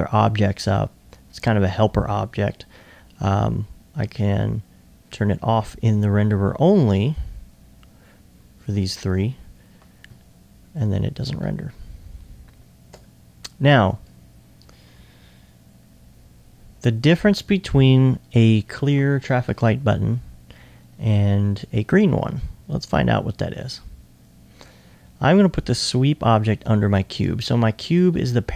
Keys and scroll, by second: 27.7 r.